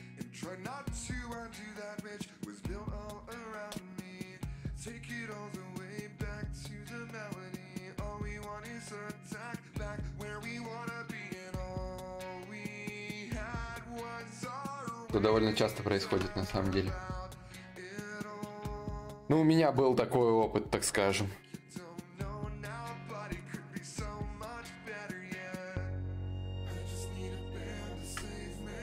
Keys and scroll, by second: 18.0 shift+d, 22.6 shift+d, 23.2 shift+d, 25.7 d, 28.5 d.